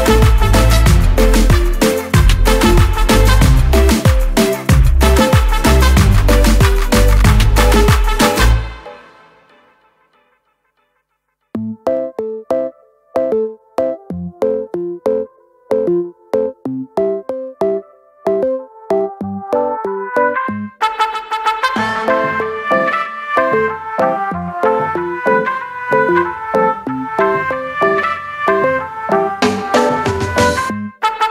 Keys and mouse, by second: 1.3 click, 3.3 click, 9.8 click, 15.2 click, 17.0 click, 18.5 click, 22.1 click, 25.1 click, 26.5 click, 26.6 click, 28.0 click.